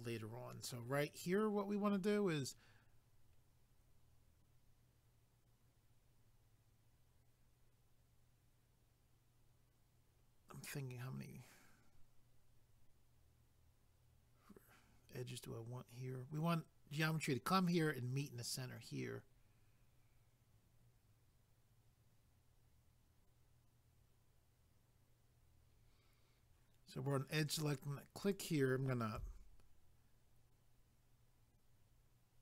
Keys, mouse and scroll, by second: 1.5 scroll up 1, 28.3 click.